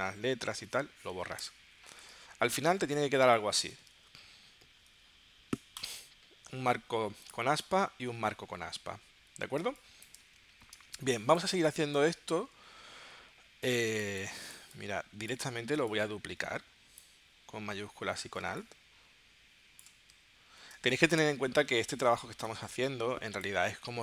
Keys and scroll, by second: 0.7 super+y, 1.4 BackSpace, 3.3 space, 4.1 super+y, 7.9 super+y, 9.7 space, 10.8 space, 13.9 space, 18.4 space, 20.8 space.